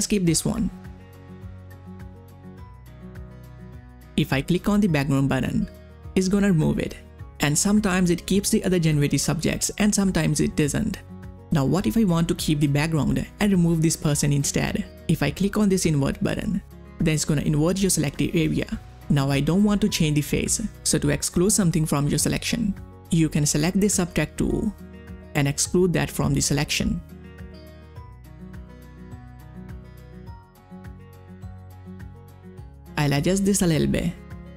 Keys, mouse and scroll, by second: 0.9 ctrl+scroll down 1, 0.9 click, 2.6 ctrl+scroll down 1, 2.9 space, 3.1 click, 3.4 space, 4.9 ctrl+scroll up 1, 5.0 click, 17.1 click, 23.1-25.9 drag, 25.9 [, 26.0 [, 26.1 [, 26.2 [, 26.4-29.8 drag, 30.3-34.5 drag.